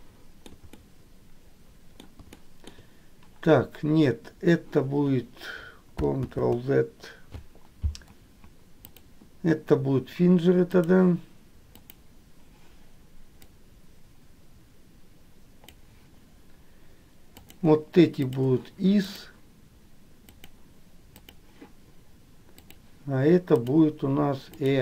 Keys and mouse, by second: 0.0 shift+middle click, 0.9-2.1 middle drag, 2.5 shift+middle click, 6.4 ctrl+z, 9.0-11.1 drag, 12.0 click, 13.7-15.8 drag, 18.2 shift+click, 19.3-20.8 drag, 21.2 click, 23.6-24.8 drag.